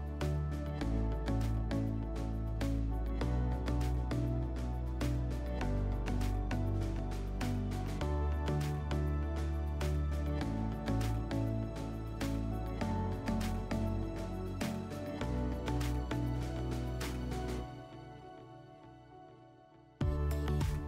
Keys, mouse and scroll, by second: 3.0 click, 4.0 click, 7.7-8.9 drag, 16.0 click, 17.2 scroll, 18.3 click.